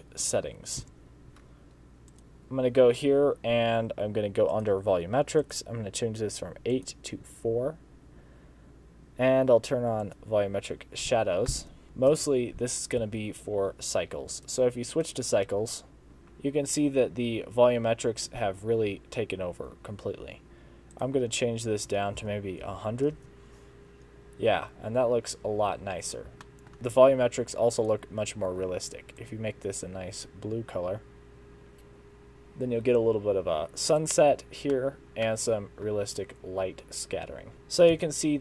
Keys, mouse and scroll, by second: 0.9 Home, 2.1 click, 4.5 click, 5.5 click, 10.1 click, 11.5 middle click, 12.2 KP_0, 13.1 z, 14.4 click, 16.1 ctrl+b, 16.1 scroll down 2, 21.2 click, 22.8 0, 26.5 shift+middle click, 26.7 click, 27.8 click, 34.0 click, 35.0 shift+middle click, 35.0 scroll down 3, 35.1 middle click, 38.0 Home.